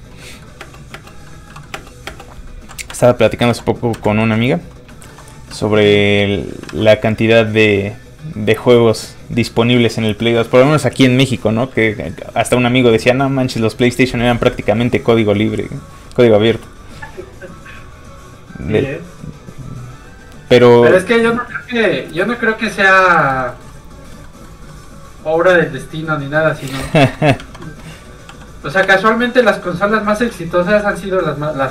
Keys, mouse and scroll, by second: 0.3 middle click, 0.4 middle click, 0.6 space, 1.3 middle click, 2.9 Right, 4.0 Left, 4.2 middle click, 4.9 shift+middle click, 6.1 middle click, 6.2 click, 6.7 alt+a, 7.4 a, 7.5 click, 21.3 middle click, 22.8 shift+middle click, 23.0 middle click, 23.1 middle click, 23.3 shift+middle click, 25.0 shift+scroll up 1, 25.9 click, 26.9 alt+shift+z, 27.4 ctrl+Tab, 28.3 Tab, 28.4 f, 28.5 click, 28.9 shift+space, 30.1 shift+click, 30.8 click, 30.9 n.